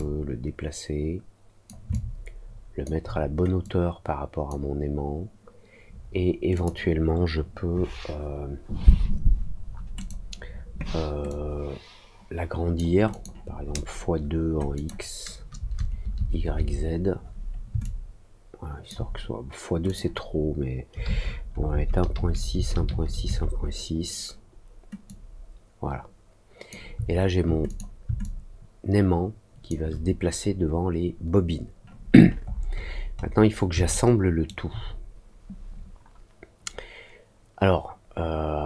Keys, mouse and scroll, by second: 1.8 alt+click, 3.6 click, 6.5 click, 9.9 click, 11.2-12.7 drag, 13.0 click, 14.7 click, 17.8-18.8 alt+drag, 19.8 click, 25.0-26.6 drag, 27.6 click, 28.1-29.6 alt+drag, 32.1-33.3 scroll up 4, 33.8 alt+middle click.